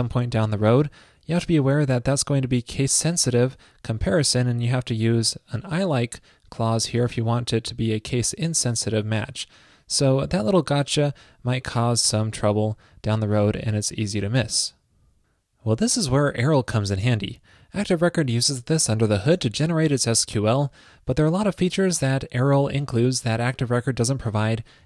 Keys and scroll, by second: 14.6 super+s.